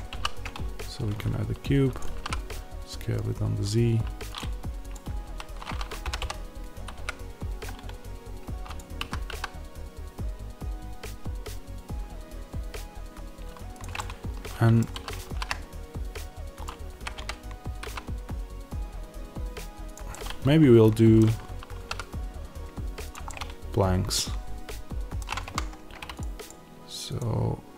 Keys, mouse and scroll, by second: 0.0 s, 1.9 click, 2.0 s, 4.3 click, 6.0 g, 8.7 click, 8.9 a, 13.7 click, 13.8-16.5 middle drag, 14.8 s, 16.5 click, 16.8 g, 19.8 click, 20.0-23.0 middle drag, 21.6 s, 23.0 click, 23.2-27.1 middle drag, 25.4 Tab, 27.1-27.7 drag.